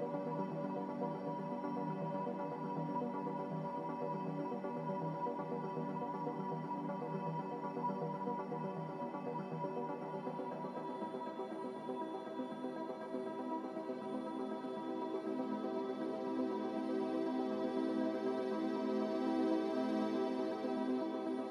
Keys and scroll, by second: 20.1-21.5 typing.